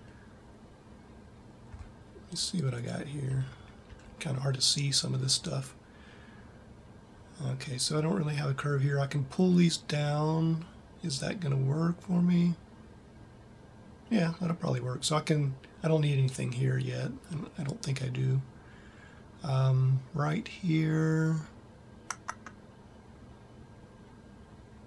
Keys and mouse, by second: 2.9 click, 3.1 a, 3.9 a.